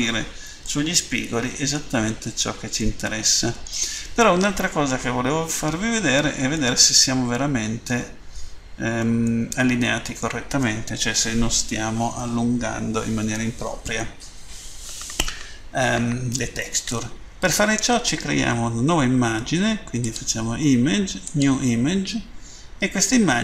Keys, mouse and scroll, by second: 0.6 middle click, 2.7 middle click, 6.5 middle click, 9.3 shift+middle click, 20.0 click, 21.1 click.